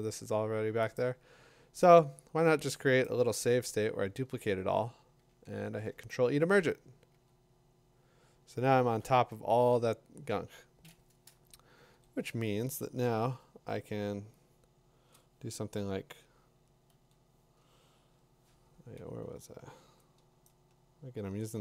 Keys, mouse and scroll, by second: 1.0 click, 5.6 ctrl+e, 7.1 Tab, 9.2 Tab, 11.9 l, 14.3-15.1 l, 15.1 click, 16.9 l, 19.0-21.6 Tab.